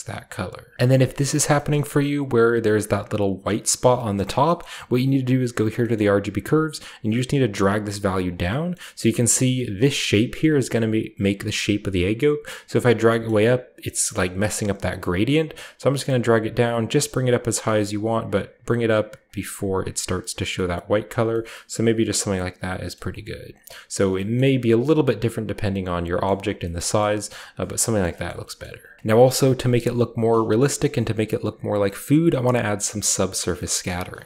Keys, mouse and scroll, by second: 0.7 ctrl+shift+z, 0.7-1.3 scroll up 1, 1.3-3.7 scroll up 1, 1.6-3.7 shift+middle drag, 3.7-4.5 scroll down 1, 4.1 middle click, 4.5-5.0 middle drag, 4.5-6.6 scroll up 1, 5.0-5.7 drag, 5.2-6.9 middle drag, 7.3 click, 7.6 click, 8.1 click, 8.4-10.3 middle drag, 11.9 click, 12.6 click, 14.8 scroll up 1, 15.4 click, 15.9 click, 15.9-16.3 scroll up 1, 16.4 click, 16.7 click, 17.2 click, 17.5 click, 17.9 click, 18.2 click, 18.6 click, 19.2 click, 19.7 click, 20.1 click, 20.7 click, 21.5-22.9 scroll down 1, 22.9-23.5 middle drag, 22.9-23.5 scroll down 1, 23.5 click, 24.6-26.2 drag, 24.6-26.2 scroll down 1, 24.6 typing, 26.2-26.6 middle drag, 26.7 shift+middle click, 26.9 shift+middle click, 28.0 shift+middle drag, 28.2 shift+middle drag, 28.2-29.0 shift+scroll down 1, 28.5 shift+middle click, 29.0 ctrl+b, 29.3-30.6 middle drag, 29.8-31.5 shift+scroll up 1, 30.7-31.8 shift+middle drag, 31.5-33.5 shift+scroll down 1, 31.9 shift+middle drag, 32.4-33.5 shift+middle drag, 33.8 middle click.